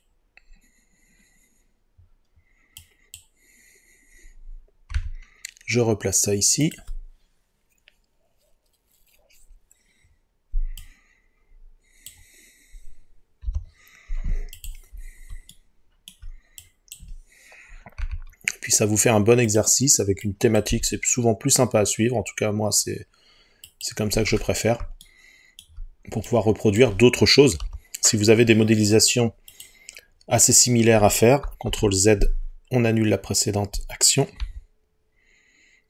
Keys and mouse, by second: 5.0 g, 6.7 click, 13.5 Delete, 18.0 g, 19.5 click, 20.7 g, 23.7 click, 26.3 click, 27.6 Delete, 31.7 ctrl+z, 34.4 Delete.